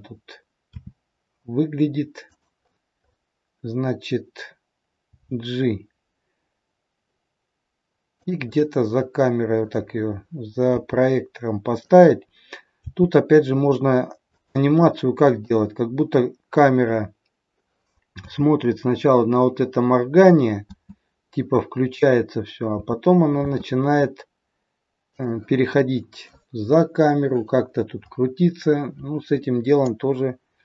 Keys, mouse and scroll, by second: 16.0-16.4 scroll up 1, 17.0-17.4 scroll up 1.